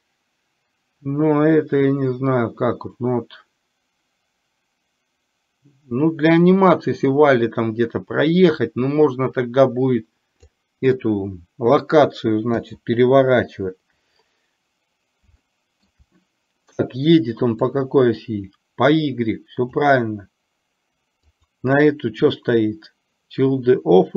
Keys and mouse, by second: 15.5-16.1 shift+middle drag, 17.8-20.0 drag, 21.3 click.